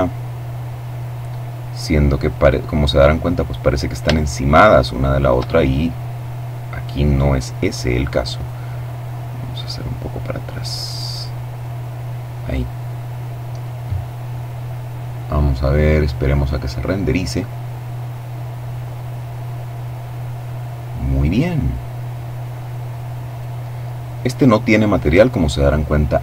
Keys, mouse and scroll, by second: 1.3-2.2 scroll up 2, 2.5-3.0 scroll down 2, 3.4-4.9 shift+middle drag, 5.2-6.5 middle drag, 7.5 right click, 8.1-10.9 drag, 11.0 middle click, 12.8 middle click, 22.4 right click, 24.0 click.